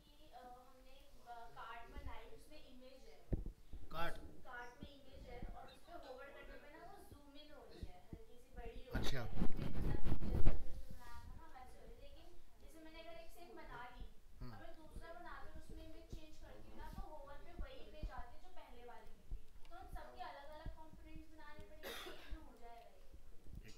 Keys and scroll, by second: 19.6 alt+Tab, 23.1 ctrl+space.